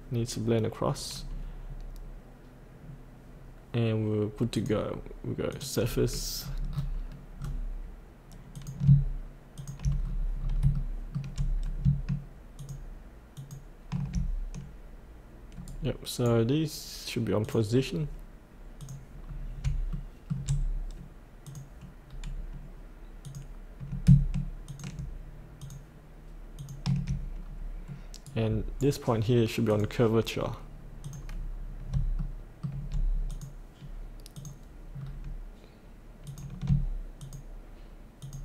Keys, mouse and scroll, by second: 1.1-2.8 scroll up 1, 2.8 scroll down 1, 3.4-4.5 scroll up 1, 4.5 click, 6.4-6.7 scroll down 1, 7.4-8.5 scroll down 1, 8.5 click, 9.6 ctrl+click, 10.6 scroll up 1, 10.7 shift+middle click, 12.6 ctrl+click, 13.3 ctrl+click, 15.6 right click, 17.4 click, 19.2 scroll up 1, 19.9 shift+middle click, 21.4 click, 22.0 scroll down 1, 23.2 click, 24.6 ctrl+click, 25.6 ctrl+click, 26.6 ctrl+click, 27.5 scroll up 1, 28.2 right click, 29.7 click, 31.6 scroll up 1, 32.2 shift+middle click, 33.3 click, 34.9-36.3 scroll down 1, 36.3 click, 37.2 ctrl+click, 38.2 ctrl+click.